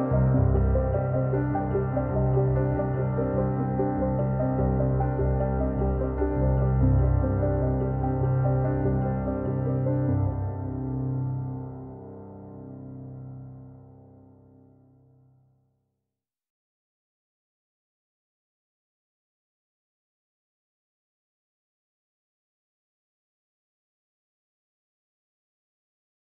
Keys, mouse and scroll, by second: 3.2-6.4 drag, 9.3-13.2 drag.